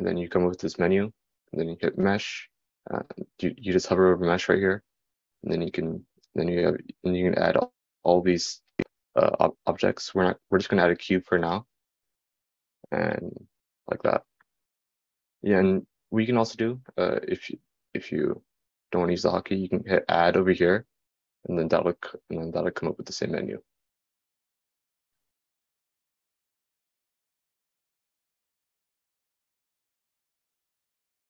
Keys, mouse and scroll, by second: 18.3-31.0 drag.